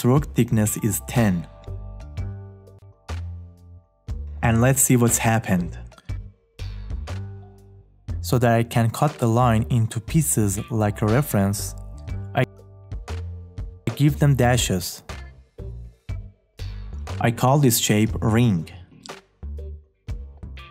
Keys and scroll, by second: 3.7 `.